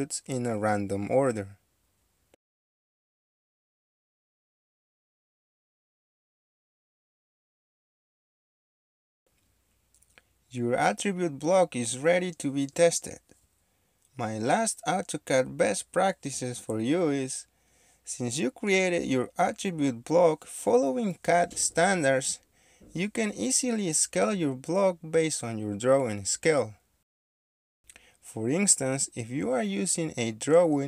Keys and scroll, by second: 0.6-1.9 typing, 15.9-18.1 typing, 19.9 shift+Escape, 22.4 1, 24.5 a, 24.6 KP_Subtract, 24.8 KP_3, 26.8 Escape, 26.8 ctrl+c, 27.7 ctrl+v, 30.1 Escape.